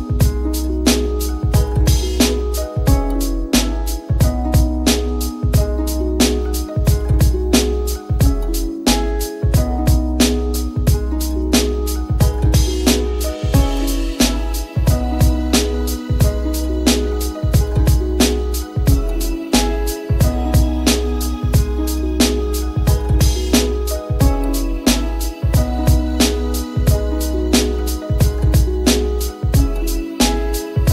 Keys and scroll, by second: 11.8 e.